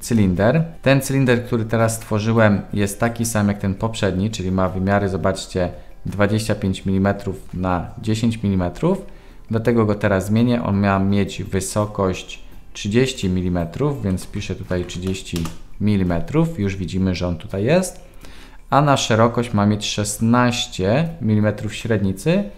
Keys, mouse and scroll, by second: 13.1-16.4 drag.